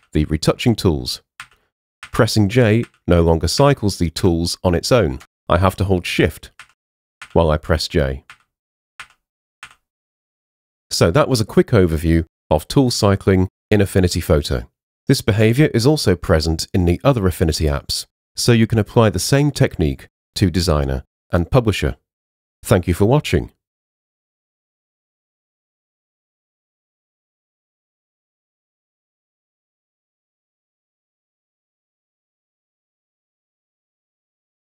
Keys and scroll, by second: 0.0 j, 2.1 j, 3.6 j, 6.7 shift+j.